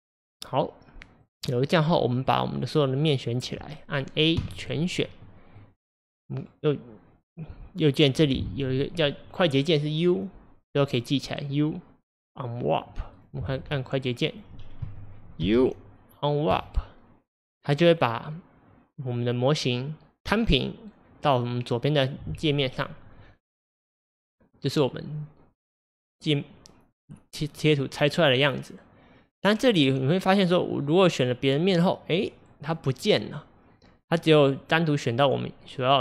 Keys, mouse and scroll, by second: 2.3-3.8 drag, 4.4 a, 5.0 scroll down 1, 5.3-13.2 middle drag, 13.2 click, 14.4 click, 14.9 a, 16.7 u, 27.0 click, 30.7 click, 31.8 click, 34.1 click, 34.7 click.